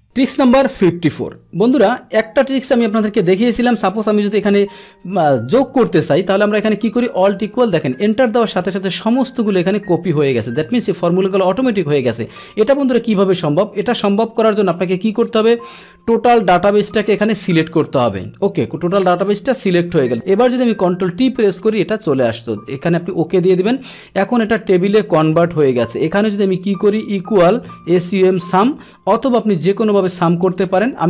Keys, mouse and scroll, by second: 0.0 click, 1.9 Up, 7.2 Return, 8.0 Return, 9.2 click, 12.0 ctrl+z, 13.7 ctrl+z, 16.1-19.9 drag, 20.6 ctrl+t, 21.8 click, 23.5 click, 24.6 click, 25.4 ctrl+shift+l, 25.9 Down, 28.5 Tab, 29.8-30.3 typing, 30.9 Down.